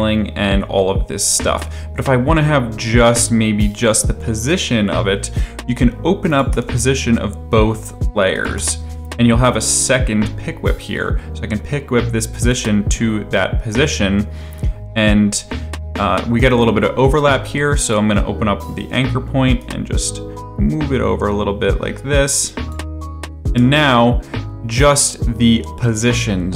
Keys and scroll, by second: 1.7 ctrl+z, 6.5 p, 8.5 p, 18.1 a, 23.4 space.